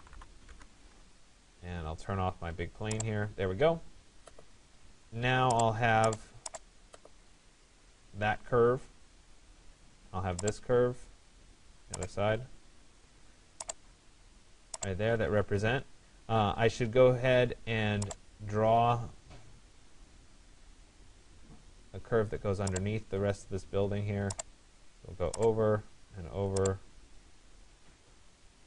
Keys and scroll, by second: 0.1 Return.